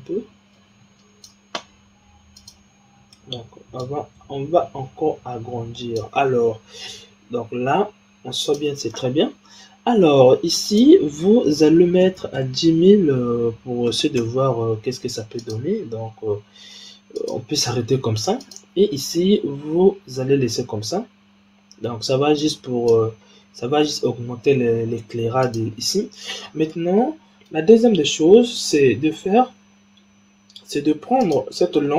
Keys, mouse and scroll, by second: 3.8-6.8 drag, 6.8 g, 10.6-12.1 drag, 12.1 KP_0, 12.2 KP_0, 15.3-17.2 drag, 18.3 click, 22.3-25.4 drag, 26.2-26.6 scroll down 3, 26.6-28.5 middle drag, 28.5 click, 29.2-31.1 scroll down 7, 31.1 click.